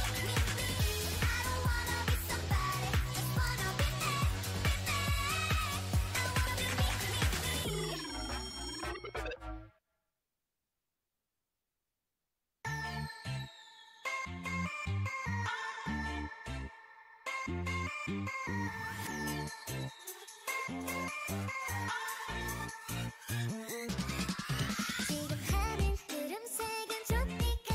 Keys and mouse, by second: 1.0 x, 2.4 ctrl+z, 3.6 x, 4.8-8.0 drag, 8.0 ctrl+z, 8.9 click, 9.6 shift+e, 12.8 shift+e, 13.8 a, 15.6 ctrl+Tab, 16.8 c, 17.9-19.9 drag, 19.3 middle click, 19.3 right click, 19.9 e, 20.5 s, 25.4 Tab.